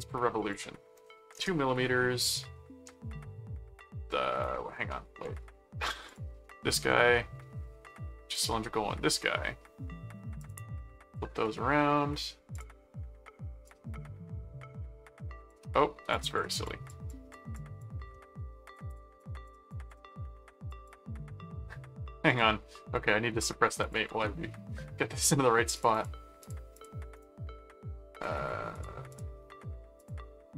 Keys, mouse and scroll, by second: 0.4 click, 4.9 middle click, 6.1 click, 8.3 click, 10.4 click, 12.5 click, 13.7-15.5 drag, 16.1-18.1 drag, 18.1 middle click, 18.7-20.2 drag, 20.7 click, 22.3 click, 23.8 shift+click, 24.1 shift+c, 25.1 click, 25.8-27.3 drag, 27.1 right click, 28.7 click, 30.0 click.